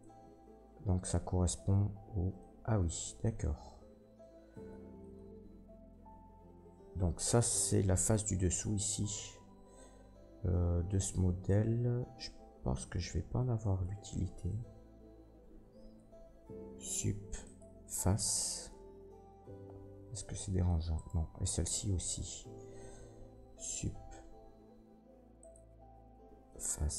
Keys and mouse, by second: 4.9-26.1 shift+drag, 8.7 middle click, 8.7 right click, 9.9 middle click, 13.8 Tab, 14.5 Tab, 16.6 Delete, 20.9 middle click, 20.9 right click, 23.4 Delete.